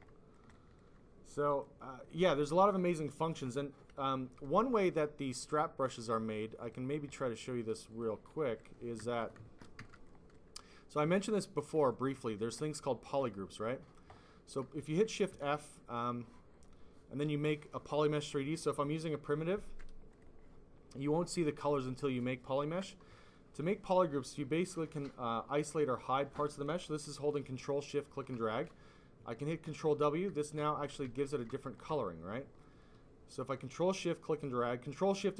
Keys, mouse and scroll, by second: 0.0 click, 0.4 alt+click, 0.6 alt+click, 1.3 click, 6.5 click, 7.8 click, 8.0 click, 8.4 f, 8.9 click, 9.1 shift+click, 9.9 alt+click, 10.3 click, 11.8 click, 12.6 click, 15.2 f, 16.4 click, 20.0 click, 23.2 ctrl+click, 29.6 ctrl+w, 30.9 ctrl+w, 31.5 ctrl+click, 32.3 ctrl+click, 32.7 ctrl+click.